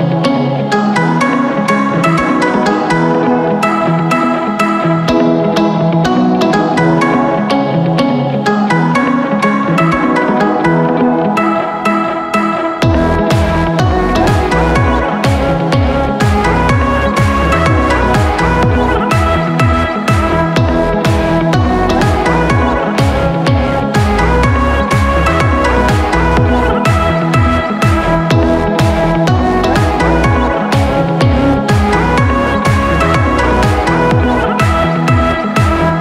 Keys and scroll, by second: 4.4 ctrl+t, 6.3 Return, 7.3 ctrl+shift+t, 10.0 Return, 14.7 ctrl+shift+t, 17.9 Return, 20.5 b, 34.4 ctrl+KP_Subtract.